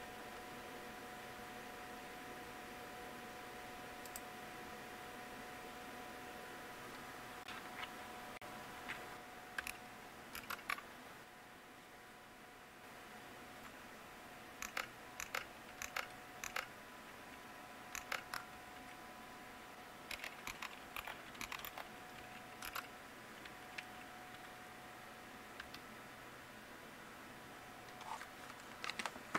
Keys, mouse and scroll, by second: 10.2 super+Return, 14.5 ctrl++, 15.1 ctrl++, 15.7 ctrl++, 16.3 ctrl++, 17.9 ctrl++, 19.7-22.0 typing, 22.6 Return.